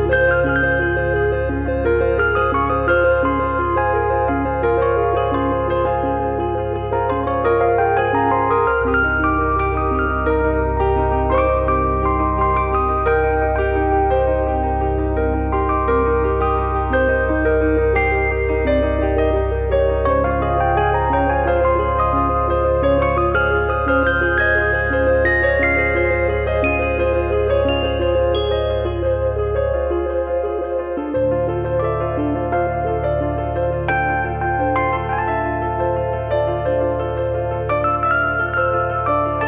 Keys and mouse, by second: 2.9 shift+b, 3.5 shift+b, 3.9 alt+z, 4.6 click, 5.1 e, 5.7 click, 6.2 click, 6.9 f, 7.3 click, 8.3 e, 9.5 click, 9.9 click, 10.9 f, 11.3 click, 14.7 e, 15.5 click, 15.8 click, 16.2 f, 16.5 shift+middle click, 16.9 middle click, 17.2 click, 18.1 e, 19.1 click, 19.5 f, 19.7 shift+middle click, 20.4 KP_3, 21.4 KP_9, 22.2 shift+middle click, 22.6 click, 27.3 click, 29.1 click, 29.7 shift+middle click, 30.4 click, 32.7 e, 33.3 click, 33.7 click, 34.4 click, 35.2 click, 37.1 click, 38.6 click, 39.1 click.